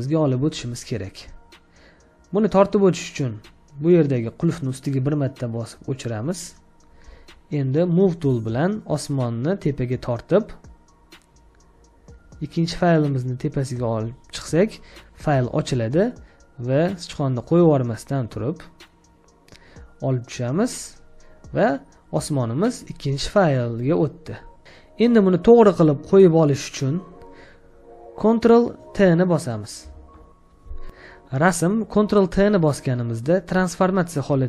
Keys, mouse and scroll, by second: 21.6 scroll down 1, 30.0 ctrl+t.